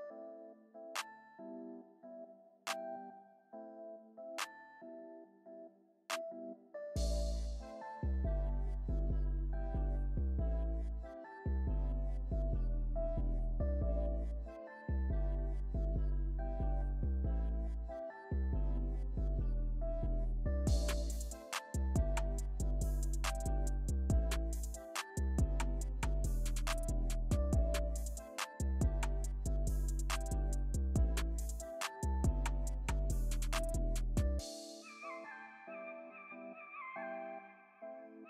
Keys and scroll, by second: 28.4 alt+super+z.